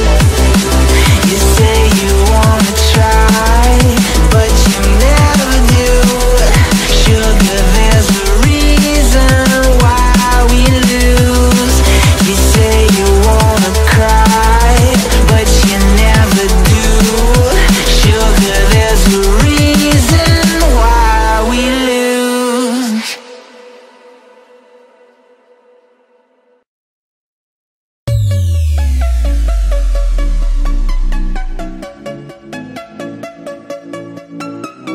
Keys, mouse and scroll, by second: 0.9 shift+a, 2.2 ctrl+a, 4.1 Tab, 4.7 click, 5.9 shift+click, 6.9 shift+click, 8.4 shift+click, 9.0 shift+click, 9.5 shift+click, 10.0-11.2 scroll up 4, 11.4 ctrl+b, 14.7 Tab, 15.0 click, 15.8 z, 16.9 click, 17.4 scroll down 2, 17.6-21.3 middle drag, 22.2 click, 23.5 KP_3, 24.6-25.4 scroll down 5, 25.6 s, 28.9 click, 29.7 scroll down 1, 30.1-32.0 middle drag, 32.0 KP_7, 32.6-33.1 scroll up 3, 33.1-34.3 scroll down 11, 34.3-34.9 scroll down 2.